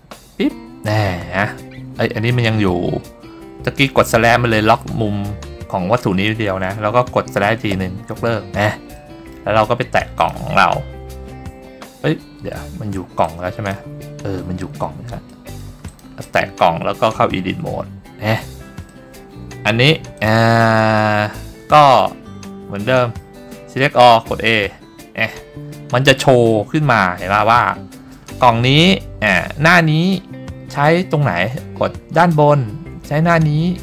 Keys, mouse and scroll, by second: 0.0 click, 1.0 scroll down 2, 1.6-1.9 scroll up 2, 2.0-2.7 scroll down 2, 3.8-4.1 scroll down 1, 4.1-4.4 scroll up 1, 4.4 scroll down 1, 5.1-5.6 scroll down 2, 6.3 scroll up 2, 6.5 scroll down 1, 8.0 /, 9.3 middle click, 9.7 scroll up 1, 10.3 click, 12.8 Tab, 13.4-13.9 drag, 14.7-15.6 scroll up 5, 15.6 middle drag, 16.0 click, 16.4 click, 17.6 Tab, 19.0 middle click, 20.3 click, 21.9 middle click, 22.7 scroll up 1, 23.1 scroll down 1, 24.2 a, 26.5 scroll down 2, 32.3 click.